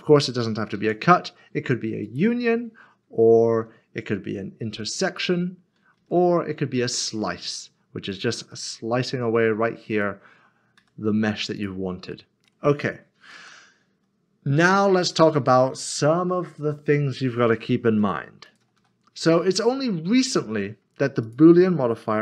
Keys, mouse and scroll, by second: 0.7 ctrl+z, 2.0 click, 5.1 click, 5.9 ctrl+z, 7.0 click, 8.5 middle click, 9.9 click, 10.8 g, 12.1 middle click, 13.3 ctrl+z, 15.8 ctrl+z, 18.0 click, 18.4 double click, 19.3 middle click, 21.3 click.